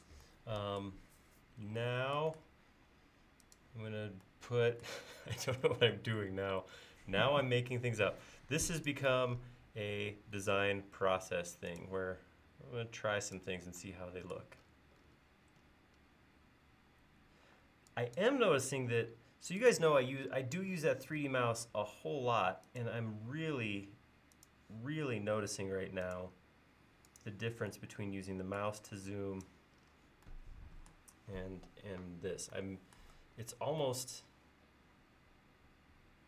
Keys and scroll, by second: 2.7 l, 17.5 e, 18.5 l, 28.8 e.